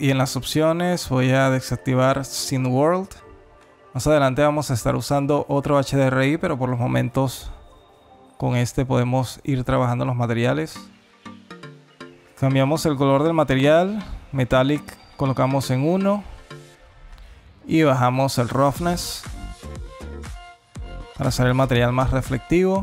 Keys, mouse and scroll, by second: 1.0 click, 9.7 click, 13.0 click, 13.6 click, 14.7 click, 16.9 click, 18.2 click, 20.4 click.